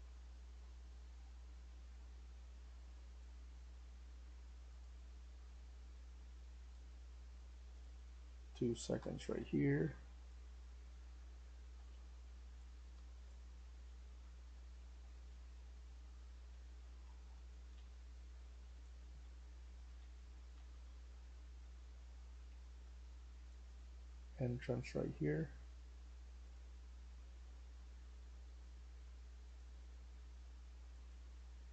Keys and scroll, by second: 0.5 typing, 1.6-3.0 typing, 8.7-25.2 typing, 8.9 Return, 26.9-28.6 w.